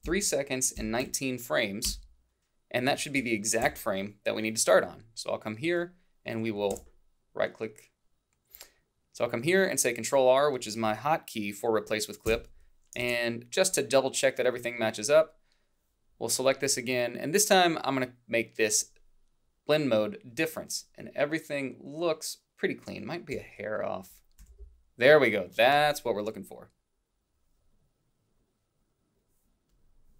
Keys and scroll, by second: 0.8 1, 1.9 Return, 3.7 i, 6.7 ctrl+r, 12.3 alt+Down.